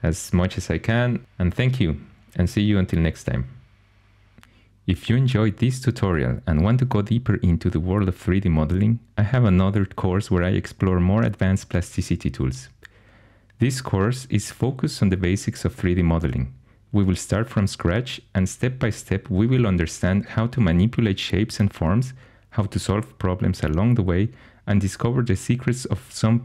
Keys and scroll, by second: 14.9 ctrl+z, 15.8 shift+x, 16.6 2, 17.7-22.7 typing, 23.2 shift+super+e, 23.8 i, 26.2 2.